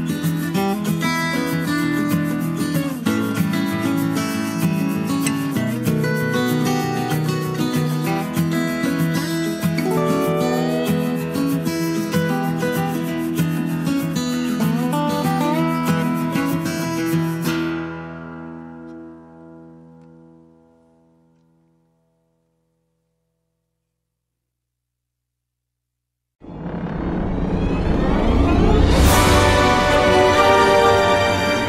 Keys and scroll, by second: 1.5 Escape.